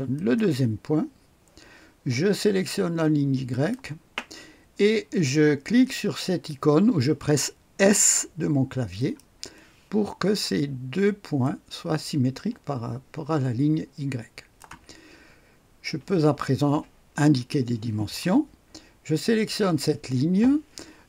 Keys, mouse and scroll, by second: 0.1 click, 3.4 click, 8.9 click, 11.3-15.0 drag, 19.1 click.